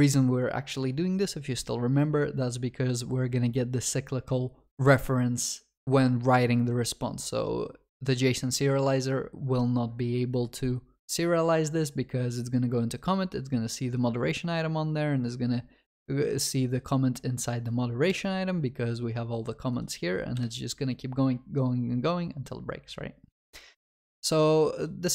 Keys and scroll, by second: 18.1 ctrl+b.